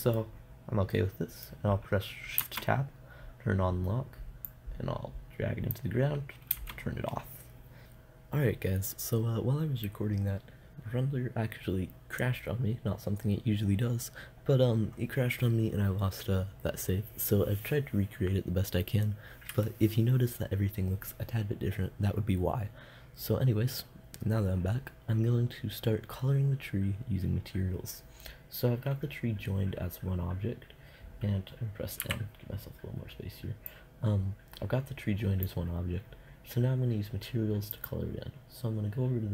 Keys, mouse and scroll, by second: 0.0 middle click, 0.2 middle click, 0.5-2.8 middle drag, 2.8 shift+Tab, 4.9-7.0 drag, 7.0 shift+Tab, 7.8-12.5 drag, 32.2 n, 33.8-35.6 drag.